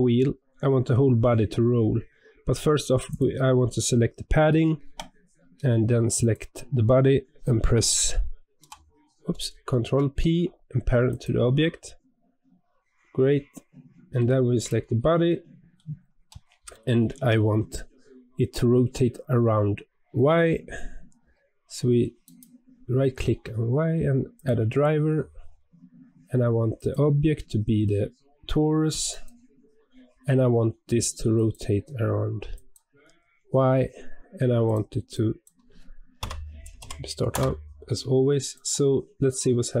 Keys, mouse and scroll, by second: 0.4 click, 3.0 click, 6.1 shift+click, 8.5 p, 9.4 ctrl+p, 13.2-14.5 middle drag, 14.5 click, 15.2-16.0 middle drag, 16.0 scroll up 1, 16.6-19.7 shift+middle drag, 22.2-25.3 right drag, 38.4 click, 38.8-39.8 scroll down 2.